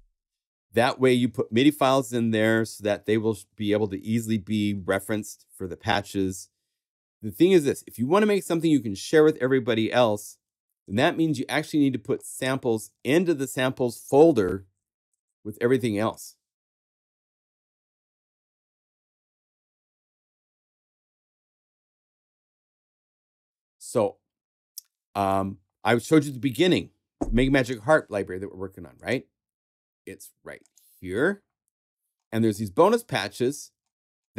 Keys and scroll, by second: 14.5 super+a, 15.1 super+Left, 15.6 Left.